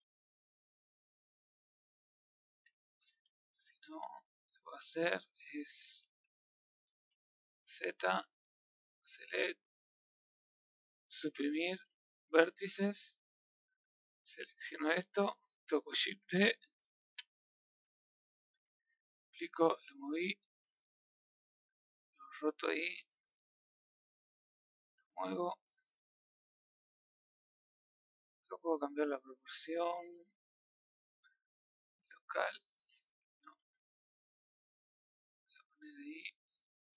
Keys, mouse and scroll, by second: 0.5-1.5 middle drag, 1.5 scroll up 3, 4.0-4.9 middle drag, 5.2 scroll up 1, 5.4-6.0 middle drag, 6.0-6.8 scroll up 1, 7.0-8.0 middle drag, 8.0 z, 8.9 click, 10.3 click, 12.4 Delete, 13.4-14.9 middle drag, 14.9 click, 15.9 shift+d, 18.8 click, 22.1-24.1 drag, 25.8 middle click, 31.3-33.3 drag, 33.3 ctrl+z, 34.1-36.8 middle drag, 36.8 click.